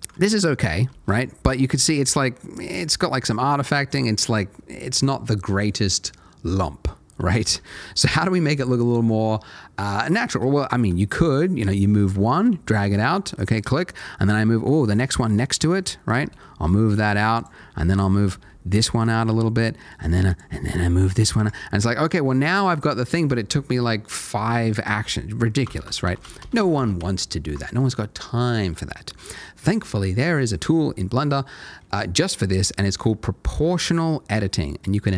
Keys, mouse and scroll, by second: 0.2 ctrl+middle click, 0.9 ctrl+z, 1.2 middle click, 7.5 ctrl+z, 10.7 middle click, 11.6 g, 13.3 click, 14.2 middle click, 16.2 g, 16.9 click, 17.3 double click, 17.6 middle click, 18.4 g, 19.0 click, 19.2 middle click, 20.3 click, 20.5 g, 21.1 click, 21.3 Tab, 21.5 middle click, 22.5 middle click, 25.8 ctrl+z, 26.0 ctrl+z, 26.2 ctrl+z, 26.4 ctrl+z, 26.6 ctrl+z, 26.7 ctrl+z, 27.0 ctrl+z, 28.0 shift+middle click, 29.0 middle click.